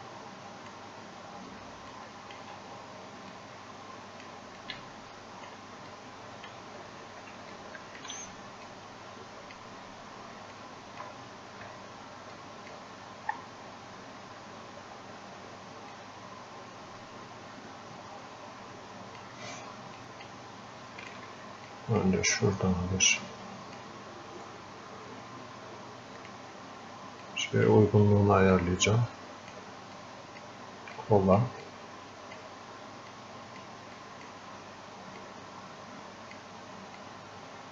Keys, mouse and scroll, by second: 6.8 scroll up 1, 7.6-10.7 alt+drag, 10.7-13.6 alt+drag, 13.6 scroll down 1, 16.3-21.2 drag, 21.7-37.7 drag.